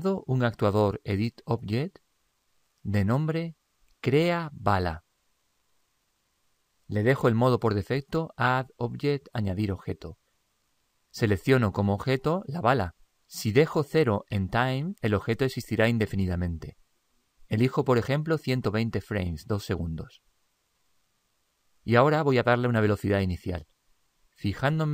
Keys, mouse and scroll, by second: 0.4 click, 4.0 click, 12.2 click, 17.9 click.